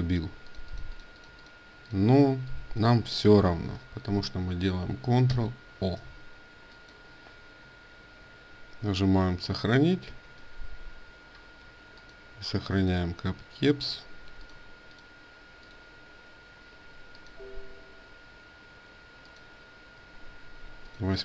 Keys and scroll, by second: 0.1 ctrl+space, 0.1 ctrl+a, 5.1 ctrl+shift+o, 9.8 ctrl+s.